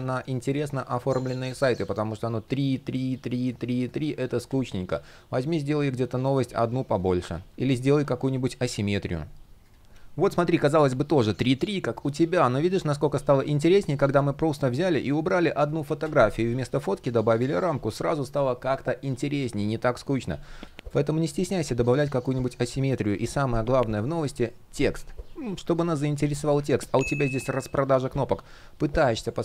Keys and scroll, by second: 3.9 super+z, 9.8 super+z, 16.1 super+z, 21.6 shift+p.